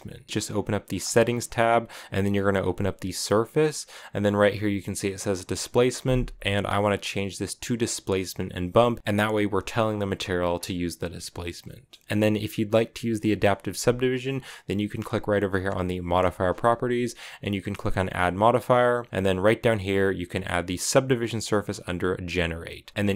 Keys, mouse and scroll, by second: 0.7-5.9 drag, 6.2-9.0 drag, 10.3-12.0 scroll down 5, 11.4 middle click, 15.8 click, 17.8-20.7 drag.